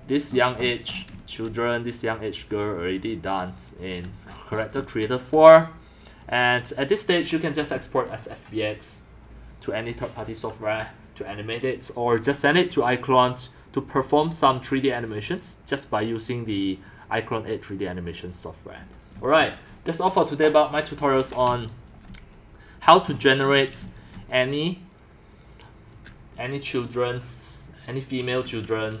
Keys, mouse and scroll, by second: 0.0 click, 0.3 middle click, 0.3-0.7 scroll, 0.9 scroll up 15, 1.1-2.6 typing, 1.9 scroll down 10, 4.0 c, 4.2-4.8 scroll up 14, 4.8 x, 6.1 scroll, 6.2 click, 7.0 click, 8.7 click, 12.9 click, 14.9 click, 18.9-19.2 scroll, 19.0-19.9 typing, 19.8 click, 20.8 click, 21.6-22.8 typing, 21.9 drag, 22.9 drag, 23.1-23.7 middle drag, 23.1-23.7 scroll, 23.7 shift+scroll down 6, 23.8 x, 24.4-26.1 c, 24.6 click, 25.7 middle click, 26.3-27.7 drag.